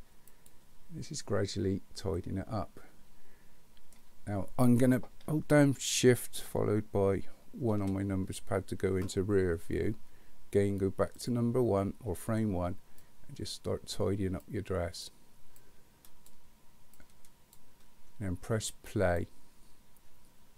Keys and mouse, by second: 0.4 click, 2.2-3.9 middle drag, 7.9 ctrl+KP_1, 11.2 click, 13.0 click, 14.4 click, 15.6 click, 16.9 click, 18.9 click.